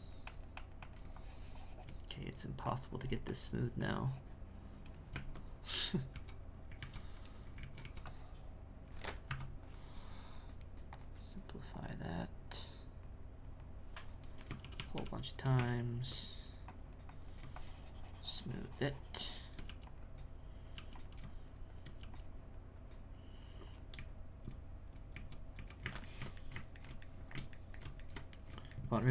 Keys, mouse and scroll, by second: 5.1 Tab, 6.1 c, 7.5 alt+a, 7.8 c, 10.9-13.9 drag, 14.6 shift+a, 14.7 shift+r, 14.9 shift+r, 15.5 Tab, 16.7-19.6 drag, 20.2 click, 21.3 shift+click, 22.3-23.9 drag, 23.9 z, 25.1 z, 26.1-29.1 ctrl+shift+middle drag.